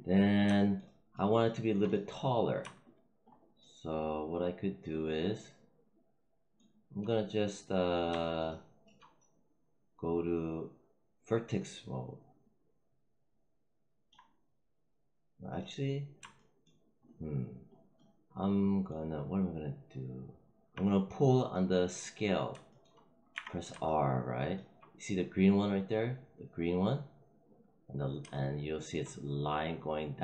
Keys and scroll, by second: 23.2 r.